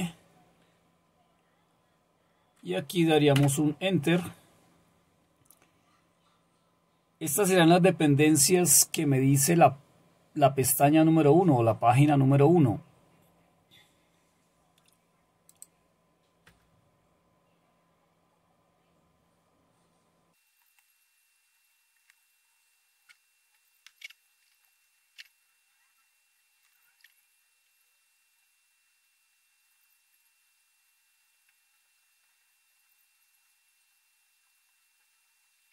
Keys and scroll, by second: 3.4 Return, 16.5 Return, 20.6 Return, 20.8 Return.